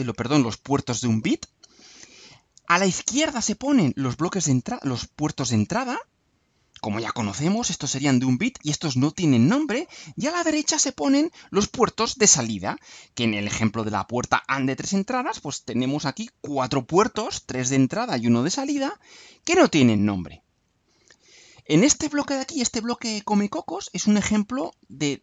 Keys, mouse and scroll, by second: 21.9-24.7 drag.